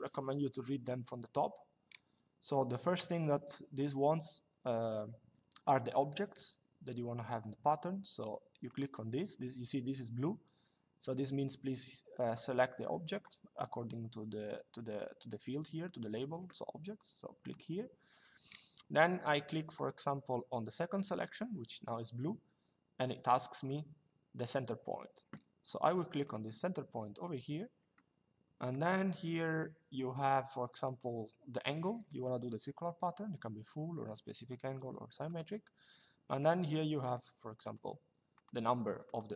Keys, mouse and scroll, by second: 8.4 click, 17.1 click, 20.7 click, 26.0 click, 27.6 middle click, 30.5 click, 34.9 click, 36.8 click.